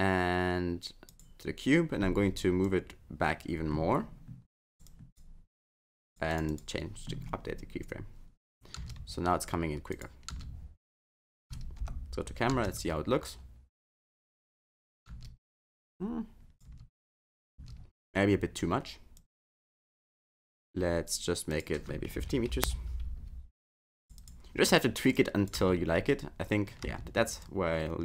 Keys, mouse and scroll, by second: 1.1 click, 2.6 click, 4.8 click, 6.3 click, 6.5 click, 8.8 space, 9.9 click, 10.3 space, 11.4 space, 11.8 KP_0, 12.5 space, 15.1 space, 16.0 click, 16.7 space, 17.6 space, 19.1 click, 20.4 click, 21.5 click, 24.0 click, 24.2 click, 25.2 click, 25.6 space, 26.9 space, 27.4 click.